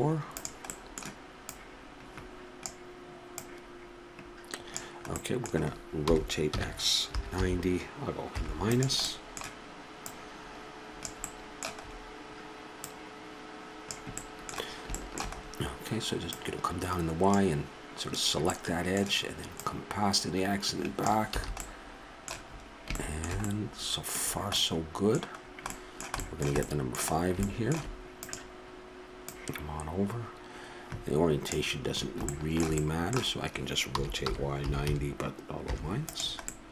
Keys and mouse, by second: 0.3-1.5 drag, 1.5-2.6 right drag, 2.6-3.3 drag, 3.4-5.1 drag, 5.1-7.1 middle drag, 6.0 r, 9.1 middle click, 10.0-11.5 drag, 12.8-14.2 drag, 14.2-14.7 middle drag, 16.2-17.3 middle drag, 17.3-18.5 drag, 19.5-20.4 middle drag, 20.4-21.6 drag, 21.3 a, 28.2-31.0 drag, 32.8-34.6 middle drag, 33.9 r, 36.5-36.7 middle drag.